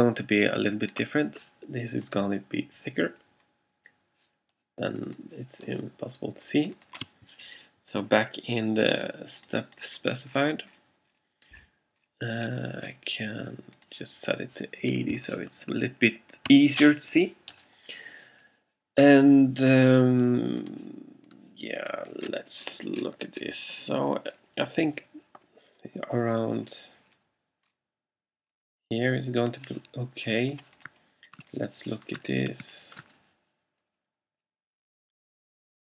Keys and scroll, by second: 0.0 shift+super+z, 31.5 alt+space.